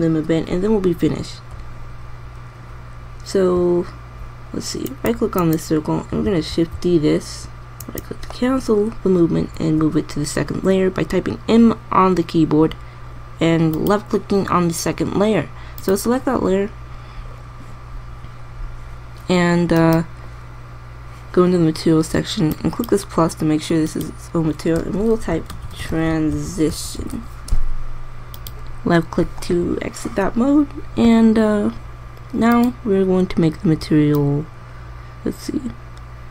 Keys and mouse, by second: 7.3 shift+d, 10.2 m, 23.6-26.3 drag, 33.2-34.9 drag.